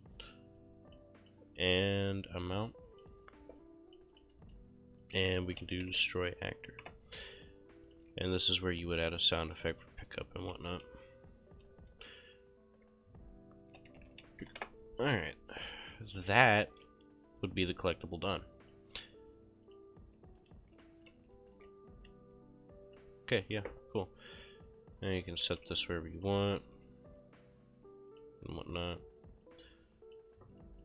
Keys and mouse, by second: 0.6 click, 2.4 ctrl+click, 3.6 click, 4.4 right click, 5.1 click, 5.1-6.4 typing, 6.9 Return, 7.9 shift+click, 8.2 q, 8.4 click, 8.7 right click, 10.1 click, 11.0 c, 13.4-15.0 typing, 15.9 click, 16.7 ctrl+shift+s, 17.5 click, 18.7 click, 20.4 right click, 20.6-23.7 typing, 23.7 Escape, 25.7 ctrl+v, 26.0 click, 26.7 ctrl+v, 27.5 click, 28.6 ctrl+v, 29.5 click.